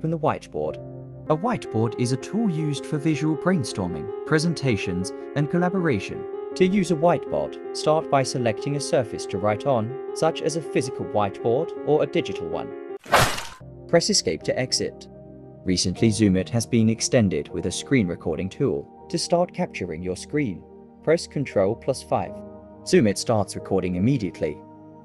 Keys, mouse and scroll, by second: 13.3 Escape, 20.5 ctrl+5, 21.7 right click.